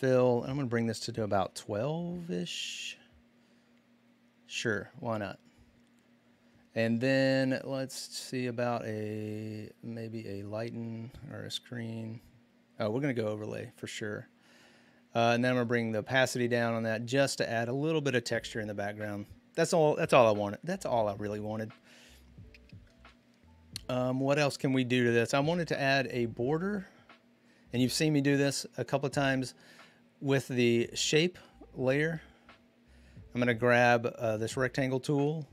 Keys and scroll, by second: 0.8-1.6 typing.